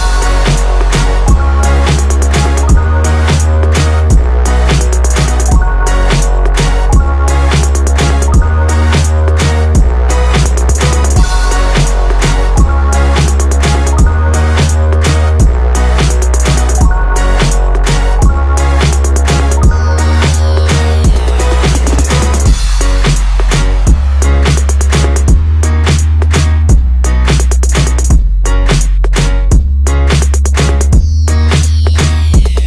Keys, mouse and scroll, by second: 0.0-0.6 scroll down 1, 0.6 click, 2.8 ctrl+click, 5.2 click, 6.0-6.9 scroll up 2, 6.9 click, 8.9 shift+click, 10.8 shift+click, 12.2 ctrl+b, 15.0 Tab, 15.5-15.8 scroll down 1, 16.4 click, 18.9 click, 19.9 click, 20.5 click, 21.1-23.9 drag, 24.9 KP_1, 26.7 click, 28.0 ctrl+KP_1, 32.6 click.